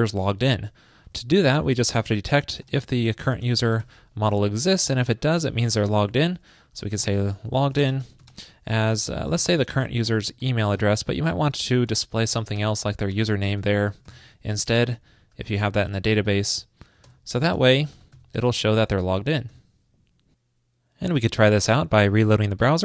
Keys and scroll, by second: 1.7 ctrl+shift+>, 5.5 super+Return, 8.9 ctrl+shift+>, 11.5 super+Right, 13.9 ctrl+shift+., 14.8 super+Left, 15.7 super+], 17.0 super+], 17.3 super+Right, 18.2 ctrl+shift+>, 19.5 super+s.